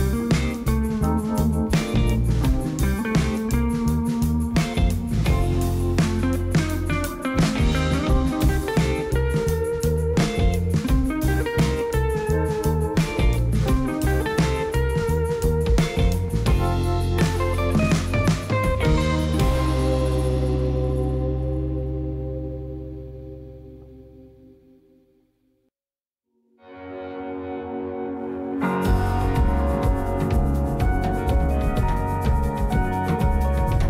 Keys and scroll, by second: 0.0 shift+z, 4.4 2, 5.6 g, 6.0 shift+z, 10.8 Tab, 20.5 ctrl+2, 28.6 q.